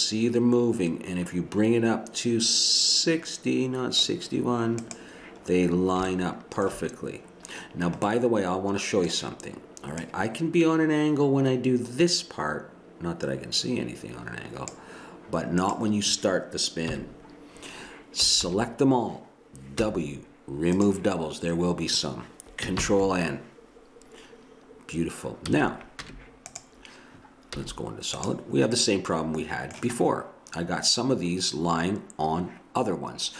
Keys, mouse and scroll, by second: 4.8-6.7 drag, 7.6-9.1 middle drag, 10.0-11.9 drag, 11.9 middle click, 15.6-16.9 drag, 16.9 KP_1, 18.2 a, 18.4 a, 19.8 w, 22.8 ctrl+n, 25.5 a, 26.0 Tab, 27.5 z.